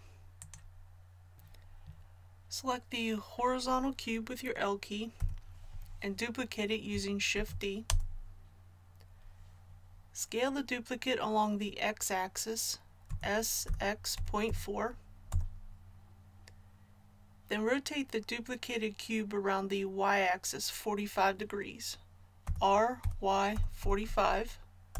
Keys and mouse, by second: 5.1 l, 7.3 shift+d, 13.0 s, 22.4 r.